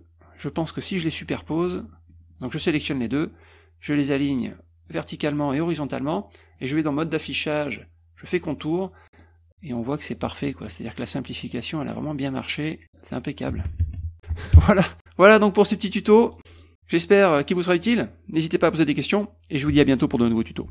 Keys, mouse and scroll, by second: 2.4 shift+click, 4.9 click, 5.6 click, 6.6 click, 8.2 click, 8.7 middle click, 9.1 middle click, 9.2 middle click, 9.5 middle click, 10.2 middle click, 10.8 middle click, 11.2 middle click, 11.5 middle click, 12.5 middle drag, 12.8 middle click, 15.0 middle click, 15.4 click, 15.7 click, 16.4 click, 16.5 click, 16.6 click, 17.2-17.7 middle drag.